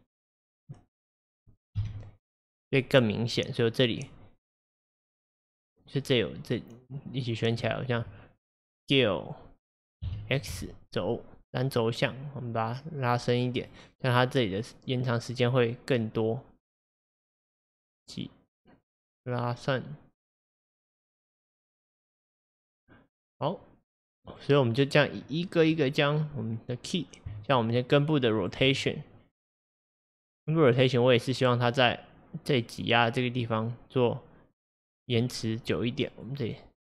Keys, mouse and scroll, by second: 1.8 Home, 10.1 s, 14.2-17.3 drag, 24.3 click, 25.7 click, 27.5-28.5 shift+drag, 30.9-34.1 drag, 35.7-36.9 drag.